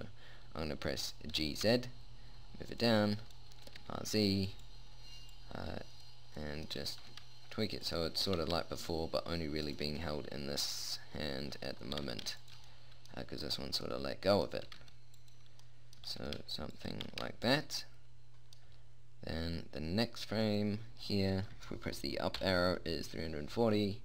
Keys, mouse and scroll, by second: 1.7 g, 4.1 r, 5.7 click, 6.8 click, 7.2 g, 8.7 g, 10.4 middle click, 11.8 middle click, 12.4 g, 13.1-14.9 middle drag, 15.1 r, 16.4 g, 17.3 g, 20.5 click, 22.8 Up.